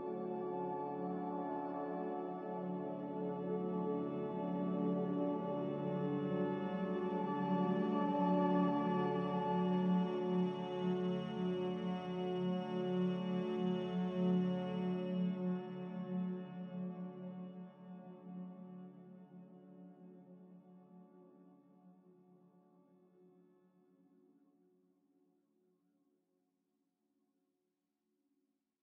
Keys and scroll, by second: 5.2 n, 7.8 a, 14.0 ctrl+c, 17.4 b, 17.8 n, 20.8 a.